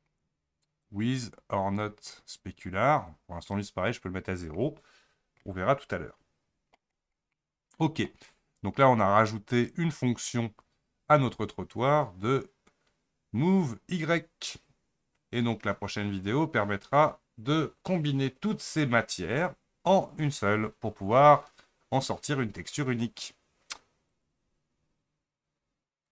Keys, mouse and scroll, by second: 0.9-4.8 drag, 4.8-5.4 scroll down 3, 5.5-7.0 middle drag, 7.0-7.4 scroll down 2, 7.4-26.1 middle drag.